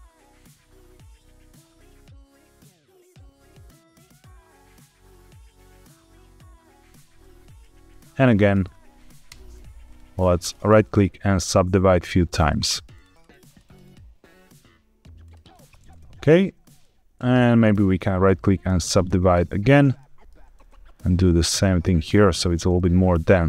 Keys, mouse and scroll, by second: 0.0-6.7 typing, 0.9 click, 1.1 click, 1.2 middle click, 1.7 click, 1.7 middle click, 2.2 click, 2.3 middle click, 2.7 click, 2.8 middle click, 3.4 click, 4.4 click, 4.6 click, 4.7 middle click, 5.4 click, 5.6 middle click, 6.2 click, 6.2-6.7 scroll down 3, 6.7 click, 7.1 shift+middle click, 8.2 middle click, 9.2 ctrl+KP_Add, 9.8 right click, 10.9 middle click, 12.3 click, 12.5 click, 12.7 click, 12.8 click, 13.0 click, 13.2 click, 13.4 click, 13.5 click, 13.7 click, 15.2 click, 15.9 middle click, 16.3-16.6 scroll down 1, 16.7 shift+middle click, 17.8 right click, 19.9 shift+middle click, 20.6 click, 21.4 right click, 22.7 shift+middle click.